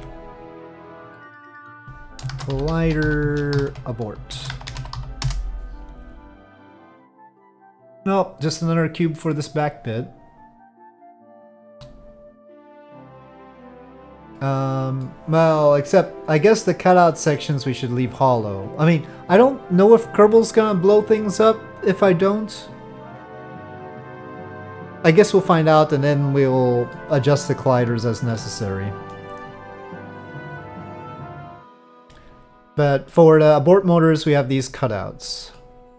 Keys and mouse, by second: 0.0 Tab, 1.2-6.1 drag, 2.8 l, 6.8-7.2 middle drag, 7.9 click, 8.4-10.8 middle drag, 11.4 shift+middle drag, 15.0-15.7 middle drag, 16.4-17.4 middle drag, 18.3-19.0 middle drag, 26.9-27.7 middle drag, 28.0 shift+middle drag, 28.6-29.1 middle drag, 31.2 KP_Divide, 31.4-32.1 middle drag, 32.8 middle click, 35.5-35.9 middle drag.